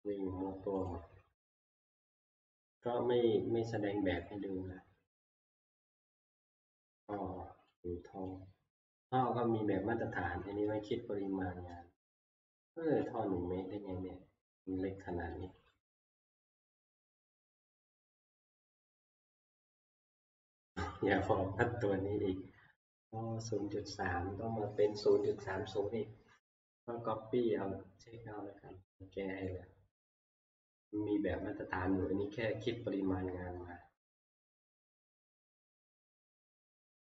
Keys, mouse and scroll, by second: 0.9 click, 1.2 scroll, 2.8 middle click, 4.6 scroll, 6.6 scroll, 6.9 t, 8.2 click, 9.1 click, 11.6 click, 14.6 click, 15.5 click, 15.7 click, 16.7 click, 18.3 click, 19.8 click, 20.2 click, 21.1 click, 21.9 middle click, 22.0 middle click, 22.0 middle click, 22.9 scroll, 27.6 scroll, 28.4 scroll, 29.5-32.0 scroll, 33.6 scroll, 34.7-37.1 scroll.